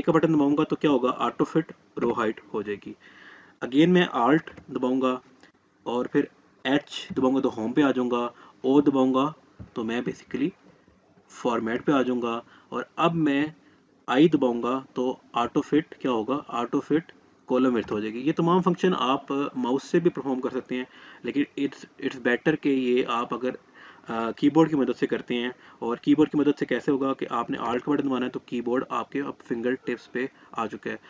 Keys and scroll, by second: 0.4 a, 7.0 h, 10.4 o, 14.9 i.